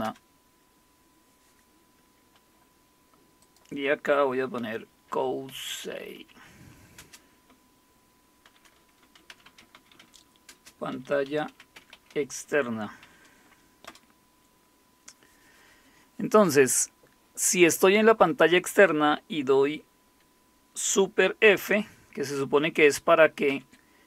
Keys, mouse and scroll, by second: 0.0 Return, 2.7 typing, 3.4-4.5 drag, 4.3-7.0 typing, 8.4-13.0 typing, 13.9 Return, 15.9 typing, 23.5 super+f.